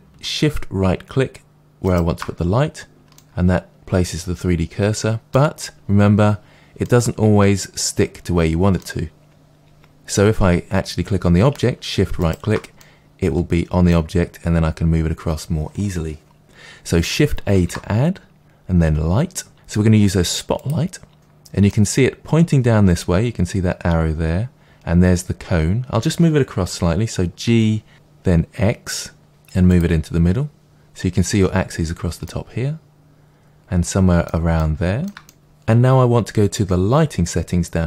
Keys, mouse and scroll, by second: 1.8 shift+right click, 3.1-9.9 middle drag, 12.2-12.7 shift+right drag, 12.7 middle drag, 17.5 shift+a, 20.6-29.7 middle drag, 27.4 g, 29.7 click, 32.2-37.8 middle drag.